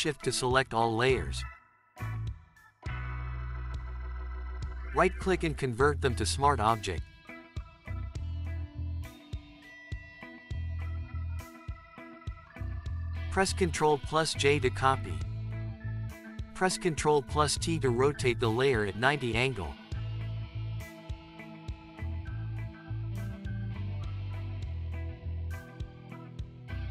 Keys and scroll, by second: 13.4 ctrl+j, 16.9 ctrl+t.